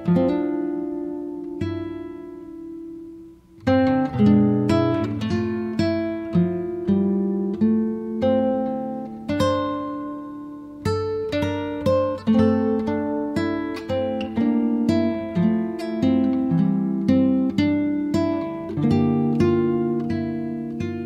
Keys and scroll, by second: 16.6 space.